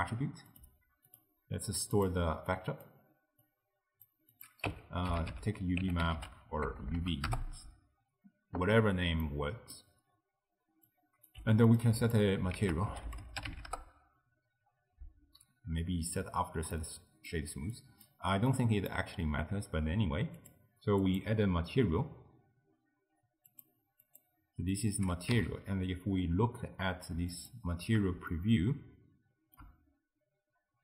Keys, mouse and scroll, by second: 1.1-2.6 drag, 3.5 drag, 4.4-6.9 drag, 6.9 BackSpace, 7.0 BackSpace, 9.2 middle click, 10.0-10.9 scroll down 1, 10.9 click, 11.5 g, 12.0 ctrl+click, 12.6 ctrl+a, 16.8-17.8 middle drag, 17.8 click, 18.6 click, 20.4 click, 21.1-24.7 drag, 24.7 middle click, 25.4 z, 28.3-30.8 shift+middle drag.